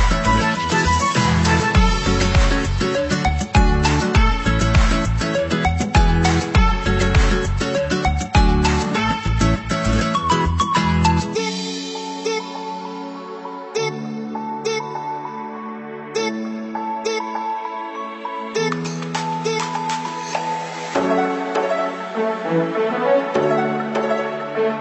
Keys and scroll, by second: 1.1 ctrl+-, 3.8 ctrl+c, 4.0 ctrl+v, 22.0 ctrl+=, 24.7 Right.